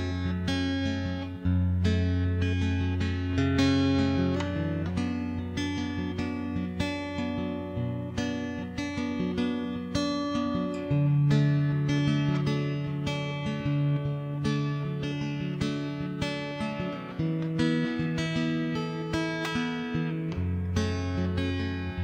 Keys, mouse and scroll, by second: 0.0 right click, 0.2 shift+s, 1.2 click, 2.1 right click, 2.5 Tab, 3.5 ctrl+KP_3, 3.7 shift+space, 4.1 a, 4.1 a, 4.5 c, 5.7 middle click, 5.9 c, 6.7 middle click, 7.3 s, 7.9 middle click, 8.1 shift+space, 8.4 click, 8.7 middle click, 9.3 click, 9.9 ctrl+z, 10.1 ctrl+z, 10.3 click, 11.5 s, 12.2 middle click, 14.1 middle click, 14.5 Tab, 14.7 right click, 15.1 middle click, 16.0 0, 17.2 right click, 17.8-19.7 typing, 18.0 right click, 18.8 right click, 19.3 right click, 20.4 click, 20.6 right click, 21.0 middle click, 21.4 middle click, 21.5 Tab.